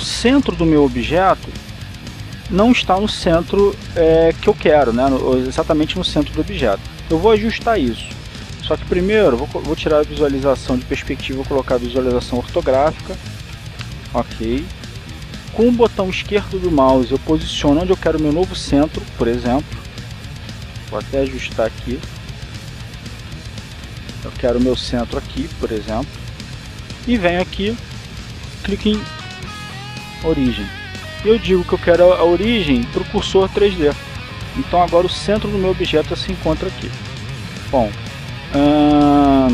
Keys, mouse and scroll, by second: 1.0 click, 10.5 click, 14.2 click, 16.8 click, 17.5 click, 18.4 click, 19.2 click, 22.0 g, 24.3 click, 26.0 click, 27.3 click, 31.2 click, 35.0 click.